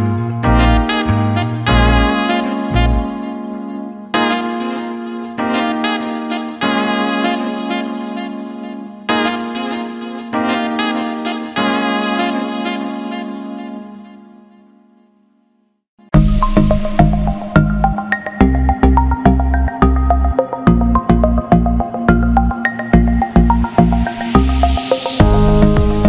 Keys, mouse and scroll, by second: 1.4 click, 1.6 click, 2.6-3.7 drag, 3.9 alt+shift+middle click, 5.0-7.9 drag, 10.1 click, 11.1-12.2 drag, 12.9 click, 13.8 click, 14.9 click, 15.8-18.7 drag, 19.4 alt+shift+middle click, 21.2 click, 21.9 alt+middle click, 25.3 alt+middle click.